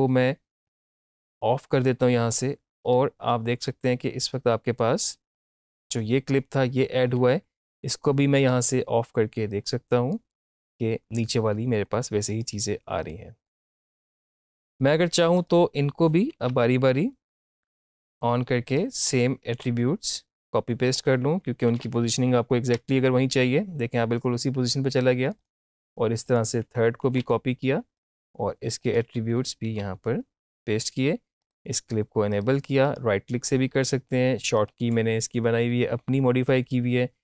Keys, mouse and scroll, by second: 0.6 right click, 1.0-5.4 drag, 8.4 right click, 9.6-13.0 drag, 13.0 right click, 13.0 click, 13.6 right click, 14.4 click, 16.3 shift+', 17.6 click, 19.4 ctrl+c, 20.4 click, 21.7 ctrl+alt+v, 22.8 Return, 25.2 click, 25.5 click, 27.1 ctrl+c, 28.0 click, 29.7 ctrl+alt+v, 31.4 click, 32.8 right click, 34.6 click.